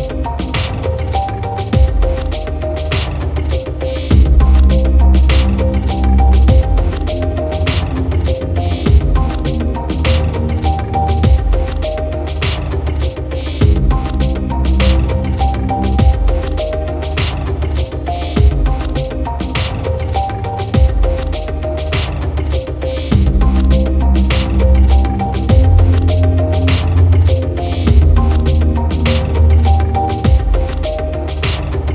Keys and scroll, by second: 4.6 ctrl+alt+shift+e.